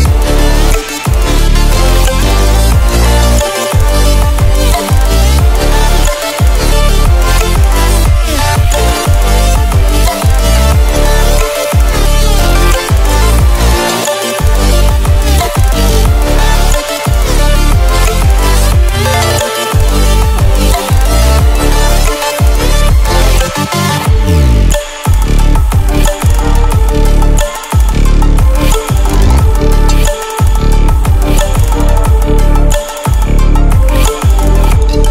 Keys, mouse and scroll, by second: 7.9-10.1 drag, 14.5 ctrl+click, 18.1-18.5 ctrl+alt+scroll down 1, 18.5 ctrl+alt+scroll up 1, 19.7-25.3 drag, 32.6-33.1 click, 33.6-34.8 drag.